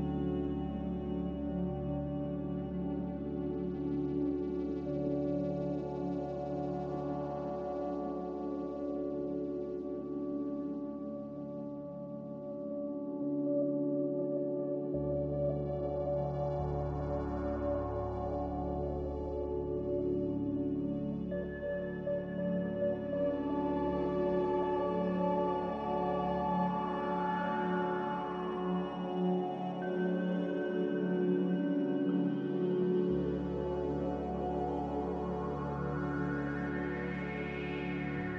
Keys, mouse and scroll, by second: 2.6 click, 13.7 a, 15.0 z, 19.5 a, 27.4 z, 32.0 a.